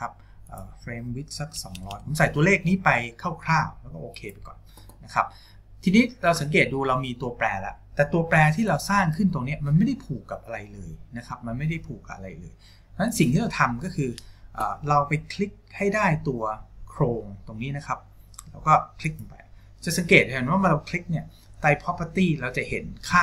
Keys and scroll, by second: 1.8 KP_0.